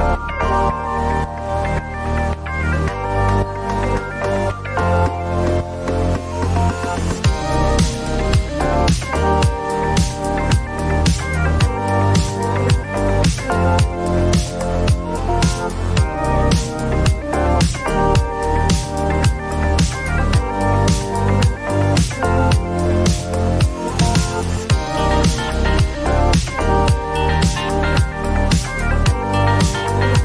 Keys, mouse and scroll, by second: 0.0 click, 2.1 click, 4.3 click, 7.3 click, 8.4 click, 9.4 click, 12.3 a, 17.0 click, 19.9 click, 21.6 ctrl+d, 24.5 click, 25.5 click, 29.4 click.